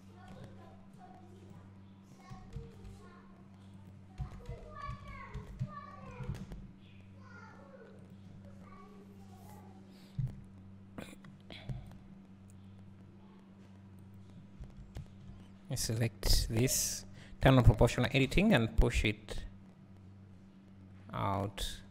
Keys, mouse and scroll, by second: 1.5 b, 2.4 g, 4.2 Tab, 4.6 z, 8.4-9.9 drag, 15.9 click, 17.4 o, 18.2 g.